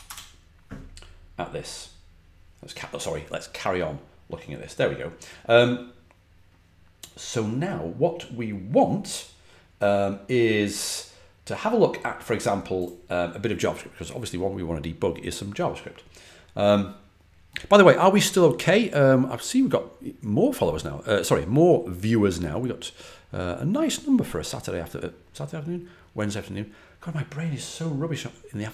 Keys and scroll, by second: 0.0-0.3 typing.